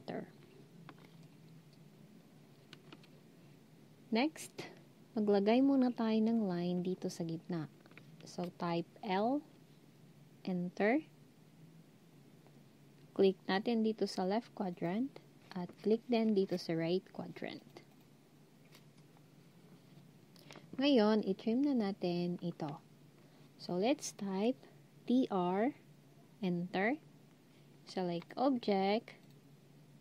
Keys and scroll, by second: 9.0 l, 24.9-25.6 typing.